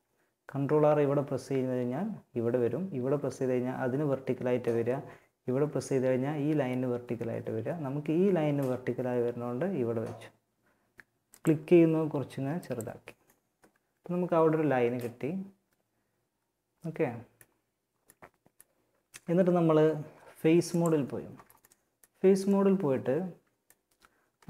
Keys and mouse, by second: 13.7 middle click, 17.3 middle click, 19.9-21.7 middle drag, 22.7-24.3 middle drag.